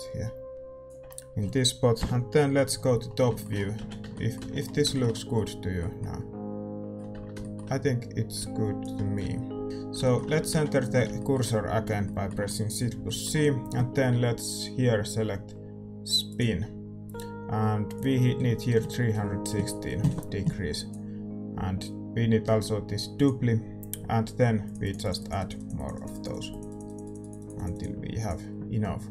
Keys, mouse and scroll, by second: 1.9 KP_7, 3.3-7.1 middle drag, 3.7 z, 4.0 Tab, 4.3 z, 7.1 Tab, 8.3-9.6 drag, 9.6 KP_7, 10.1-12.1 middle drag, 10.5 shift+c, 13.0-16.3 middle drag, 16.3-29.1 drag.